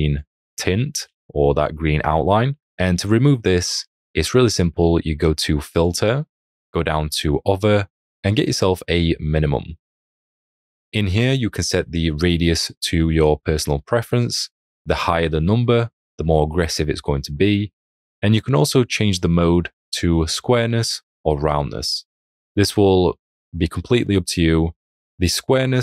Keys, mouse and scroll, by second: 1.2-2.5 alt+scroll.